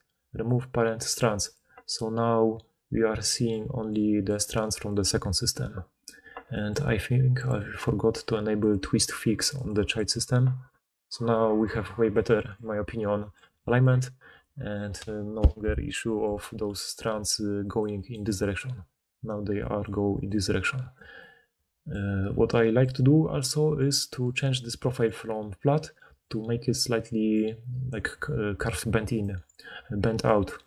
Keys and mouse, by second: 0.8 middle click, 1.0 click, 1.5-3.3 middle drag, 3.7 d, 3.8-7.4 drag, 4.2 d, 4.4 d, 4.8 d, 5.9 d, 8.6 click, 9.8-10.6 middle drag, 13.4-14.5 typing, 13.5-16.1 drag, 13.5-16.1 right drag, 16.4-20.9 typing, 23.5-30.6 typing.